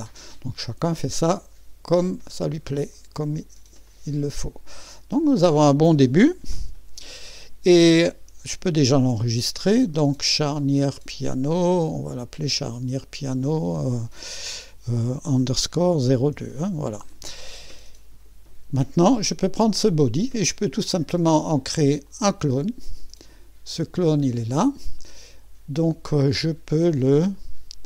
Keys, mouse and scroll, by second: 3.0 click, 3.9-6.2 drag, 6.6 2, 9.0 ctrl+s, 11.3 click, 13.0-15.4 drag, 15.4-16.3 typing, 16.6 Return, 19.7 click, 20.8 typing, 22.0 click, 23.7 click, 27.3 click.